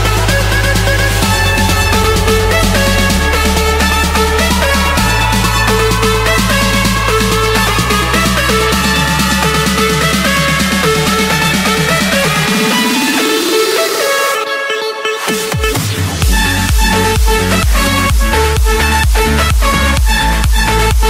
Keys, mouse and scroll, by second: 0.0 click, 0.8 Escape, 2.0-3.2 drag, 4.7 click, 5.5 click, 5.7-6.5 scroll down 5, 7.3 click, 7.6-8.0 scroll, 8.0 Escape, 8.4 click, 8.8 click, 10.3 click, 10.6 shift+click, 11.6 Delete, 13.6 click, 16.1 click, 18.2 click, 18.4 Escape, 19.5 click, 20.5-21.0 typing.